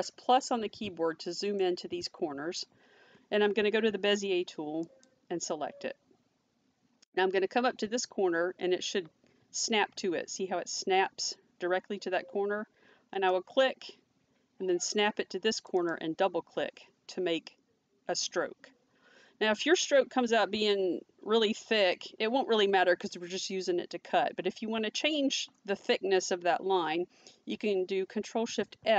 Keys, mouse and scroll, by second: 1.3 middle click, 4.9 click, 13.2 click, 15.6 click, 15.8 double click, 28.8 ctrl+shift+f.